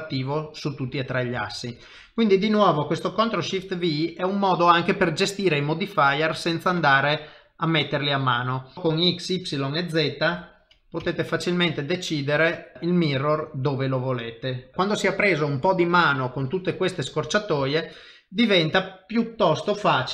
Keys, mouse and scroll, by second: 0.9 shift+middle click, 1.4 ctrl+middle click, 1.8 middle click, 3.5 ctrl+shift+v, 16.5 shift+middle click, 17.0 middle click, 17.6 shift+middle click.